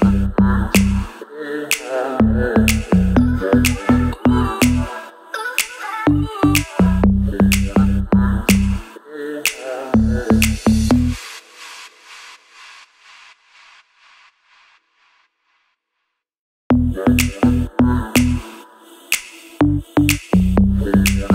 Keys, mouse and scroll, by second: 0.2-4.3 drag, 5.0-6.9 drag, 6.9 ctrl+z, 7.4 shift+click, 8.1 Right, 8.6 scroll down 1, 8.8 scroll up 1, 12.3 click, 12.4 right click, 12.9 click, 15.3 right click, 15.8 click, 16.8 scroll up 1, 17.0-17.3 scroll down 1, 17.3-17.6 scroll up 1, 17.6-19.6 drag, 19.6 click, 20.6-21.3 shift+drag.